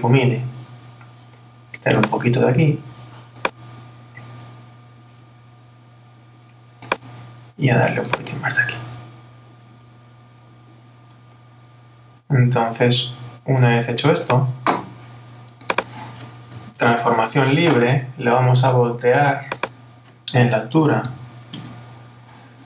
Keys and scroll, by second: 16.8 super+t, 21.6 Return.